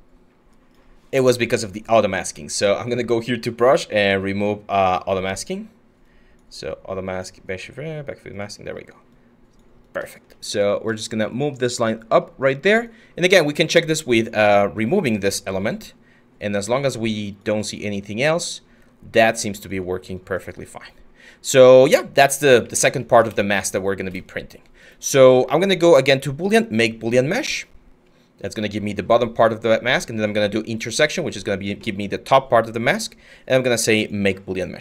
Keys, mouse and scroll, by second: 23.5-25.2 scroll.